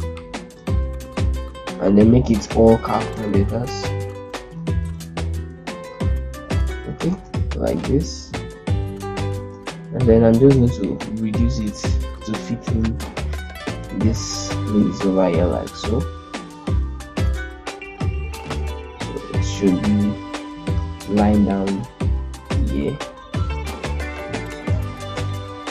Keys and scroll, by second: 1.6 ctrl+a, 2.0 shift+F4, 2.3 shift+F3, 4.6 shift+F2, 5.1 u, 5.9 Return, 6.8 ctrl+space, 7.0 ctrl+z, 9.2 ctrl+space, 12.0 z, 14.0 ctrl+space.